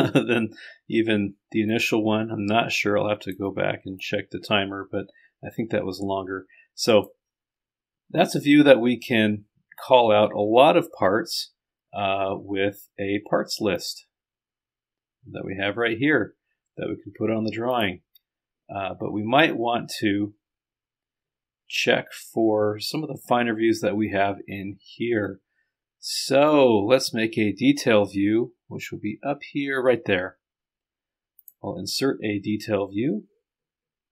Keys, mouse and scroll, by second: 1.7-3.7 drag, 4.0-7.4 drag, 12.7-13.8 scroll down 2, 13.8 click, 17.8 click.